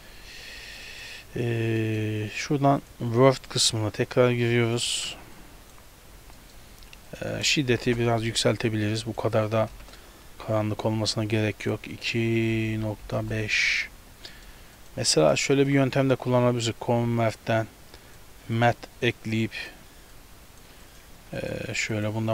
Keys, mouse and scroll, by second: 0.3-1.1 scroll down 7, 0.8 middle click, 1.2 scroll up 3, 1.8 middle click, 2.8 click, 5.4 click, 6.1-7.1 scroll up 6, 6.4 middle click, 7.1 click, 9.1 click, 11.7 click, 12.0 click, 14.3 middle click, 14.8 click, 15.1 click, 15.6 shift+a, 19.1 click, 20.2 click, 20.9 click, 21.2 shift+d, 22.0 click.